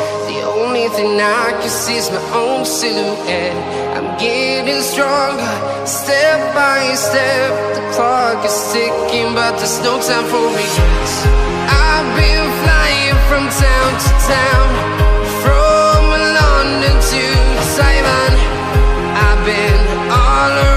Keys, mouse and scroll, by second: 0.0-0.4 scroll up 1, 1.7 click, 15.2 space, 18.0 click, 19.6 Delete, 20.1 click, 20.5 Delete.